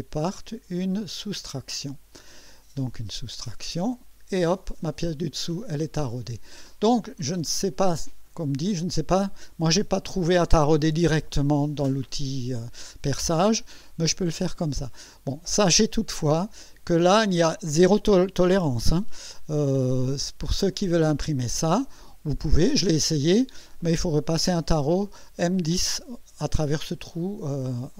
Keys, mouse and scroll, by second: 1.3 click, 4.8-6.1 drag, 7.7 click, 13.9-17.2 drag, 19.3 1, 20.0 right click, 21.6 scroll up 1, 22.4 right click, 27.6-27.9 scroll down 2.